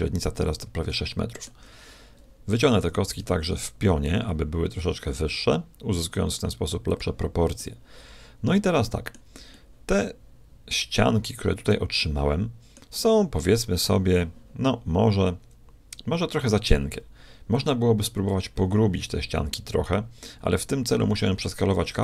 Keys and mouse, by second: 2.7 s, 7.5-9.3 middle drag, 9.3-11.4 middle drag, 11.5-13.1 middle drag.